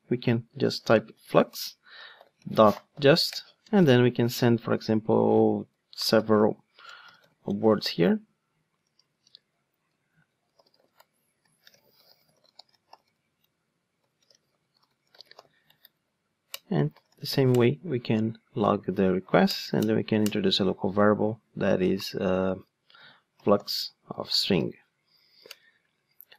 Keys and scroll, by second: 4.2 Return, 17.5 Return, 19.4 alt+Return.